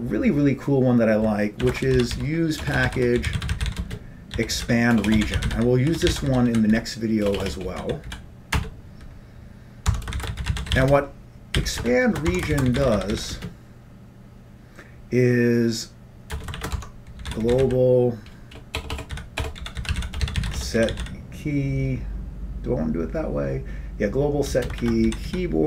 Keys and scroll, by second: 1.7-8.7 typing, 8.9 Return, 9.9 Tab, 10.2-13.9 typing, 11.9 Return, 16.4 Return, 16.6-21.6 typing, 16.8 Tab, 24.6-25.6 typing.